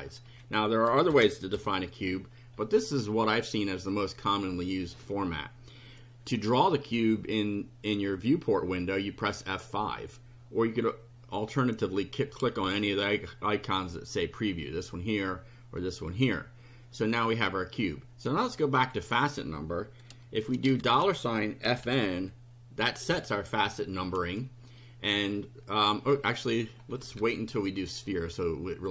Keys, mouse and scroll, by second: 0.2 End, 1.1 shift+0, 1.5 shift+;, 3.8 click, 9.2 F5, 18.8 click, 20.8-23.1 typing, 26.9 shift+Home, 27.2 shift+Delete, 28.7 click.